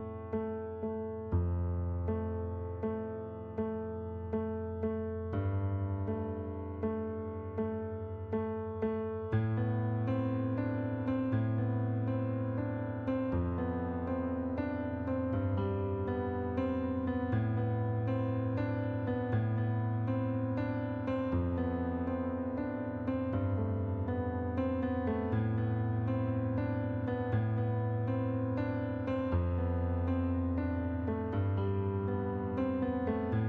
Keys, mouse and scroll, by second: 0.1 click, 1.0 click, 2.1 click, 3.2 click, 4.1 click, 4.6 right click, 7.1 click, 8.1 click, 9.5 click, 10.3 click, 12.6 click, 13.0 middle click, 13.7 click, 15.1 click, 15.8 middle click, 16.4 click, 17.5 click, 18.0 middle click, 18.9 click, 19.6 middle click, 21.0 click, 24.1 middle click, 25.0 click, 28.0 middle click, 30.2 click, 30.9 click, 31.7 shift+click.